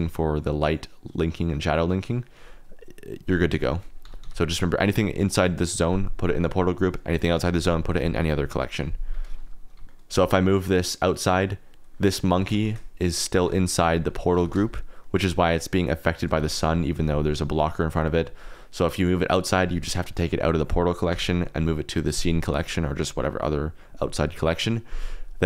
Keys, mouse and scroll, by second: 3.2 click, 4.0 r, 4.2 x, 9.7 g, 9.8 r, 9.8 z, 10.1 g, 12.3 g, 12.5 shift+z, 13.8 g, 14.3 g, 14.6 shift+z, 16.0 shift+click, 16.3 g, 16.8 click, 21.0 m.